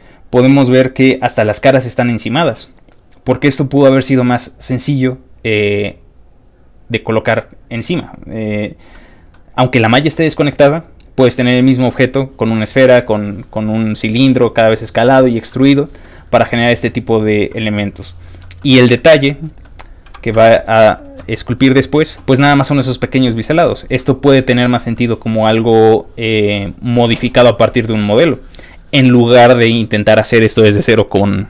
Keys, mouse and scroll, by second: 8.9 middle click, 15.5 middle click, 17.5 middle click, 18.6 middle click, 19.2 middle click, 19.8-20.5 scroll up 5, 20.8 scroll down 1, 20.9 scroll up 1, 20.9-21.8 scroll down 4, 21.2 ctrl+middle click, 23.7 scroll down 2, 23.9 ctrl+middle click, 24.9-26.6 ctrl+middle drag, 26.9 ctrl+middle click, 27.9 ctrl+middle click.